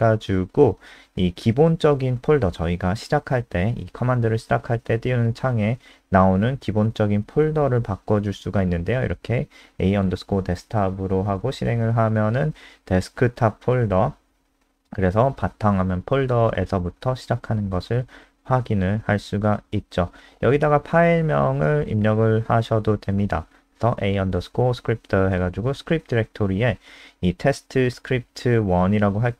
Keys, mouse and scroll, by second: 8.0-10.3 typing, 10.6 F5, 19.5 Escape, 20.5 Return, 21.3 ctrl+shift+Left, 23.1-29.3 typing, 26.1 Right.